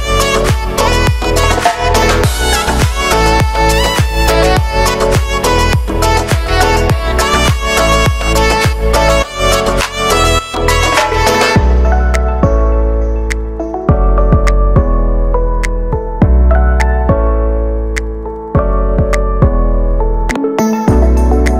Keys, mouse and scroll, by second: 1.1 scroll down 1, 1.3 shift+middle click, 1.6-2.4 scroll down 1, 2.4 shift+d, 3.0 shift+middle click, 3.3 g, 3.9 middle click, 4.1 scroll up 3, 4.3 g, 5.4 scroll down 1, 5.6-7.0 shift+middle drag, 7.0 scroll down 1, 7.2 right click, 7.4 l, 8.3 ctrl+m, 9.3 shift+n, 9.6 scroll down 3, 9.8-11.2 shift+middle drag, 11.2 right click, 11.5 l, 12.0 l, 12.9 click, 13.7 shift+d, 15.0 r, 17.9 g, 18.1 middle click, 18.9 g, 19.2 middle click, 19.5 scroll down 2, 20.0-21.0 typing.